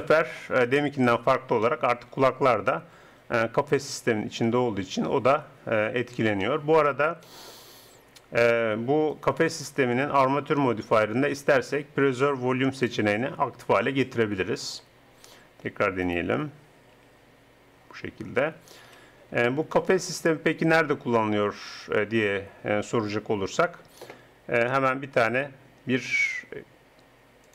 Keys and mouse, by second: 0.0 middle click, 0.8 KP_1, 3.0 r, 6.6 middle click, 9.1-10.9 drag, 10.9 middle click, 12.8-14.7 drag, 16.0-17.5 drag, 17.0 r, 17.5 right click, 17.6 middle click, 17.8 right click, 18.0 middle click, 18.8 KP_1, 21.0 r.